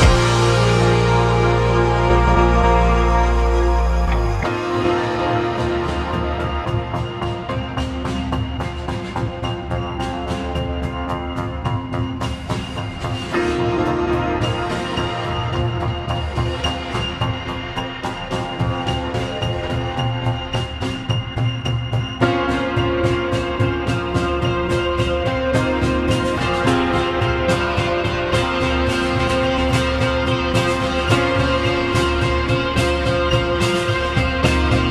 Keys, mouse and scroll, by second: 3.3-6.5 drag, 6.5 3, 6.7 click, 7.5 i, 28.7 `, 29.9 `, 31.5-32.1 scroll down 1, 32.2-32.7 scroll down 9, 33.2-34.9 drag.